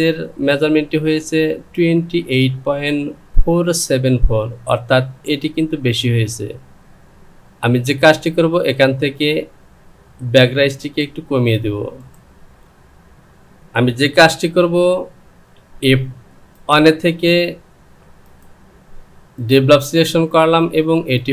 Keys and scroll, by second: 12.2 ctrl+z, 14.5 Home.